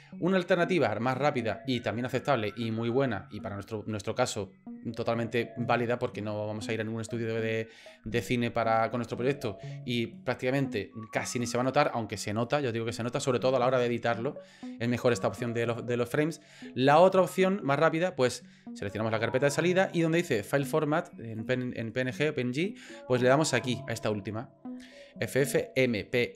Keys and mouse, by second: 21.3-26.3 drag.